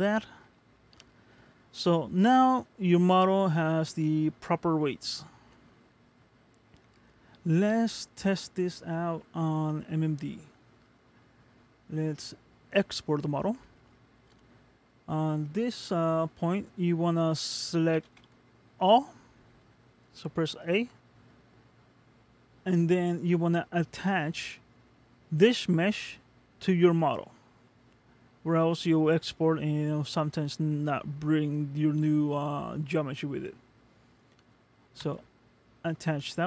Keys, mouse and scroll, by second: 0.8 middle click, 1.4-2.4 scroll down 2, 2.4 middle click, 3.1-3.7 scroll up 1, 5.1 scroll up 2, 5.5 middle click, 10.0-13.0 scroll down 1, 13.8 middle click, 18.1 a, 35.0 click.